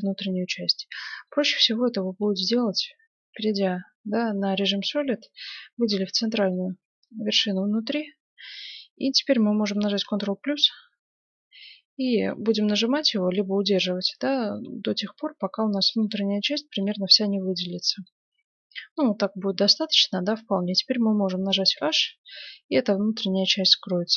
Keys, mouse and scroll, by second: 0.0-1.7 middle drag, 1.8 middle click, 2.3 Tab, 3.3 Tab, 4.1 z, 5.3-6.9 right drag, 5.9-7.6 middle drag, 10.0 ctrl+KP_Add, 17.6-19.6 middle drag, 21.7 h, 24.1 KP_7.